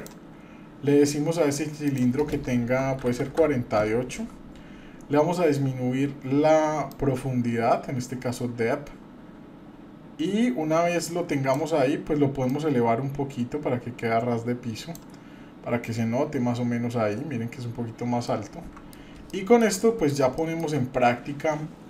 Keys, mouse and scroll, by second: 1.9-3.5 drag, 6.9-11.5 drag, 12.5-14.9 drag, 15.9-16.3 scroll up 2, 18.3 middle click, 18.3-18.6 scroll up 1, 19.3-19.7 shift+middle drag, 19.8 middle click, 20.3-20.7 shift+middle drag, 20.8-21.1 scroll up 2, 21.5 scroll up 1, 21.5-21.8 scroll down 3.